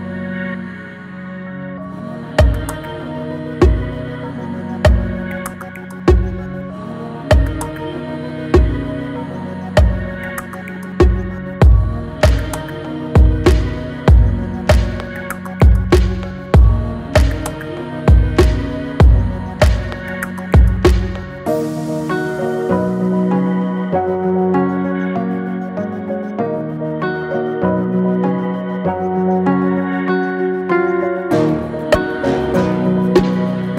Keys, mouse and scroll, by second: 0.3-0.7 shift+middle drag, 0.7-1.5 scroll down 3, 1.5 click, 2.2 alt+z, 3.4 g, 5.2-5.5 middle drag, 5.5 scroll down 1, 5.9-7.9 middle drag, 9.3-10.4 middle drag, 10.7 alt+middle drag, 11.7 alt+middle click, 12.2 click, 12.7 alt+middle click, 13.5 g, 14.9 scroll up 5, 15.3-16.0 shift+middle drag, 16.0 scroll down 2, 16.4 click, 17.2 x, 17.7 scroll up 4, 18.0 click, 18.4 Tab, 19.0 alt+z, 20.0 drag, 23.9 alt+z, 24.2 click, 24.8 x, 25.5 click, 25.8 x, 26.4 middle click, 27.2-27.5 scroll down 2, 27.5 middle click, 28.2 click, 28.7 shift+click, 29.2 x, 29.9-31.7 middle drag, 31.7 Tab, 32.1 Tab, 33.1 click, 33.4 click.